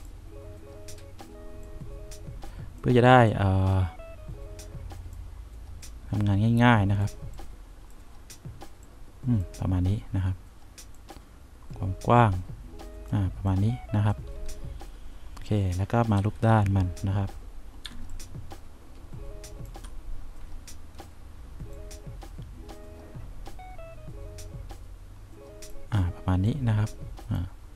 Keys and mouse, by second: 11.2-13.0 drag, 16.5 F3, 18.1 1, 25.3 click, 26.8-27.7 drag.